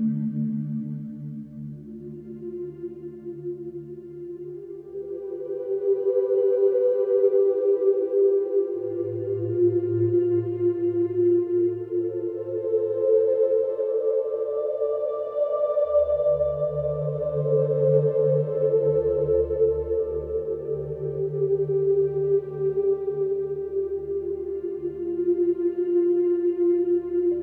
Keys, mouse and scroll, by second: 0.3 g, 1.2 s, 2.7-3.3 scroll up 1, 3.3 shift+middle click, 4.3 s, 5.4 s, 7.0 middle click, 7.8 s, 10.8 click, 11.2-12.0 middle drag, 12.0 click, 12.3 click, 12.7 alt+middle click, 13.5 shift+middle click, 13.9 g, 15.5 g, 17.1 click, 18.1-21.6 drag, 21.8-23.6 drag, 23.9 click.